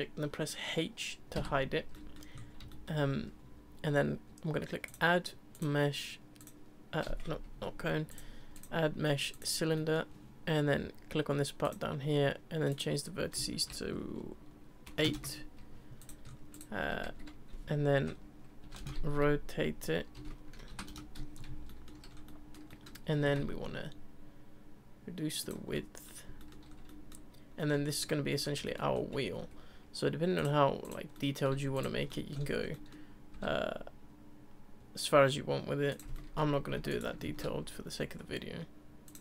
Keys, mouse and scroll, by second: 1.9-2.3 middle drag, 2.3-2.7 scroll up 4, 2.7-4.8 shift+middle drag, 4.8-7.5 drag, 7.5 Delete, 8.1-9.7 drag, 9.7-11.6 middle drag, 11.6-15.7 drag, 16.0 click, 16.2 scroll up 3, 16.5 click, 16.8 r, 19.1 r, 21.7-22.1 shift+middle drag, 22.1 scroll up 3, 22.2-23.1 middle drag, 23.1 s, 25.6 ctrl+scroll up 1, 25.7-26.1 middle drag, 26.1 scroll down 1, 26.4-26.7 shift+middle drag, 26.7 scroll up 1, 26.9-28.9 middle drag, 28.9-29.4 scroll up 2, 29.4 Tab, 30.4 click, 30.8 click, 31.1 middle click, 31.7 shift+click, 32.1-32.6 middle drag, 32.6 scroll up 1, 32.7 middle click, 36.1 middle click, 36.6 e, 37.2 alt+s.